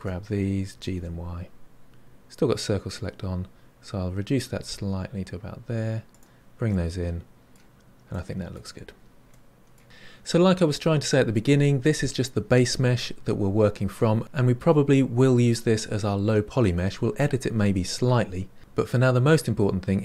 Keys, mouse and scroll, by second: 8.4 middle click, 8.8-9.2 scroll down 5, 9.2 middle click.